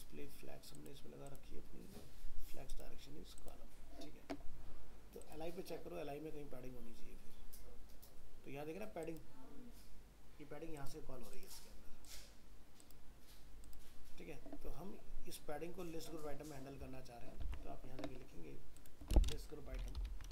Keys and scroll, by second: 17.4 alt+Tab.